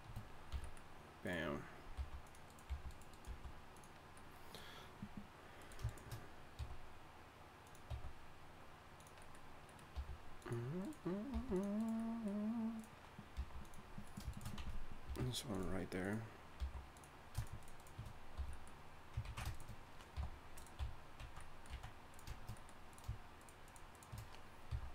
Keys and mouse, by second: 0.5 f, 2.0 g, 2.7 g, 3.3 g, 6.6 e, 7.9 e, 9.9 r, 11.3 g, 13.2 g, 13.4 g, 15.1 alt+m, 16.6 g, 18.4 f, 19.2 ctrl+z, 20.1 g, 20.8 f, 21.2 z, 21.7 z, 23.4 shift+right click, 24.7 f.